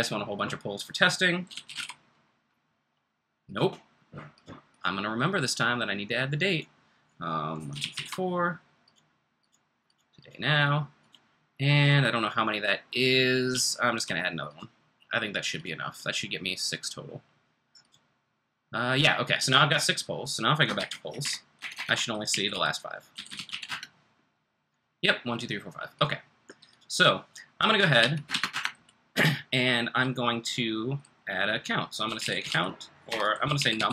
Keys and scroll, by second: 1.2-2.2 typing, 7.3-8.4 typing, 13.5-14.1 typing, 20.7 o, 21.2 alt+BackSpace, 21.5 alt+BackSpace, 21.8 alt+BackSpace, 22.0-24.0 typing, 27.7-28.5 typing, 31.9-33.9 typing, 33.0 alt+BackSpace.